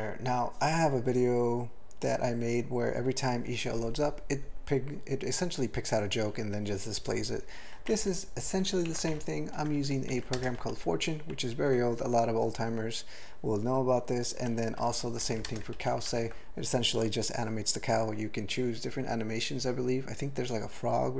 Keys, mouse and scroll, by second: 7.9 ctrl+n, 8.1 ctrl+n, 8.5 ctrl+e, 8.9 ctrl+g, 9.1 alt+b, 9.5 alt+b, 9.7 alt+b, 9.8 alt+b, 10.3 ctrl+space, 10.6 ctrl+alt+f, 11.3 ctrl+g, 14.7 alt+f, 14.9 alt+f, 15.2 alt+b, 15.5 ctrl+space, 15.8 ctrl+alt+f, 16.1 ctrl+g.